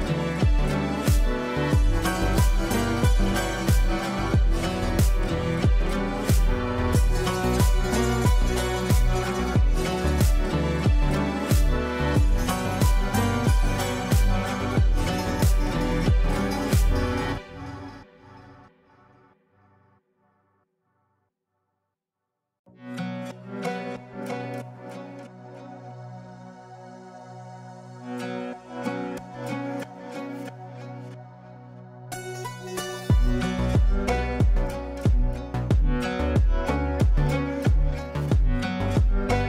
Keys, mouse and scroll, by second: 0.3 click, 3.3-4.8 drag, 6.5 c, 7.1 click, 9.1-11.6 shift+drag, 17.9 c, 19.1-21.4 drag, 23.4-25.6 shift+click, 27.3-27.9 shift+drag, 32.7 ctrl+click, 36.6-37.5 shift+drag.